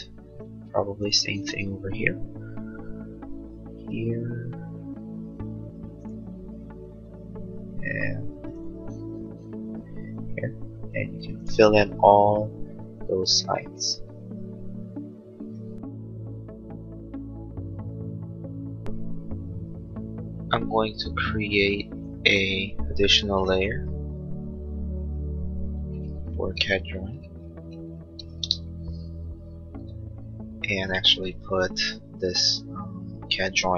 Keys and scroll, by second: 23.8 BackSpace, 29.2 Return.